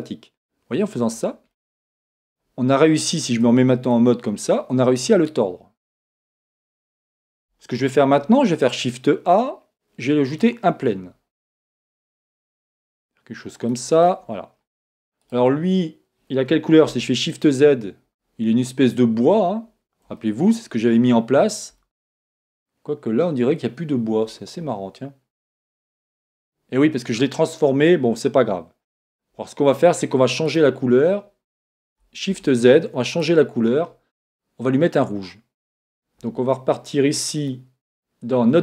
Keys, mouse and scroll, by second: 1.0 click, 1.6-5.7 middle drag, 3.5 Tab, 7.8 shift+a, 10.8-13.7 middle drag, 11.8 s, 13.7 click, 14.4 middle click, 15.6 middle click, 16.3 right click, 16.9 shift+z, 18.2-19.2 scroll up 1, 19.2-20.0 scroll up 1, 20.0 scroll up 1, 20.2-22.1 middle drag, 25.5 click, 28.5-32.2 middle drag, 29.4-31.2 scroll down 1, 31.2 right click, 32.3 shift+z, 33.5 right click, 37.3 click.